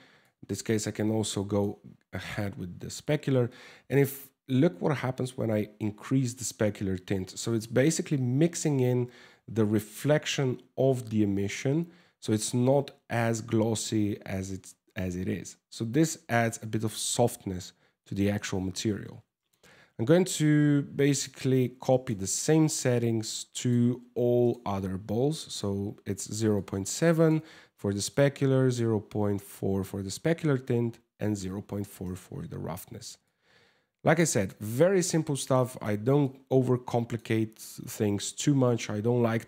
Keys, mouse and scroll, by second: 2.6 click, 11.1 click, 18.3 ctrl+s, 18.9 right click, 19.9 click, 21.1 click, 21.9 click, 24.1 right click, 25.1 right click, 26.1 click, 27.7 click, 31.7 right click, 32.8 click, 34.5 click, 35.8 click, 37.2 scroll down 3, 38.1 ctrl+s, 39.2 right click.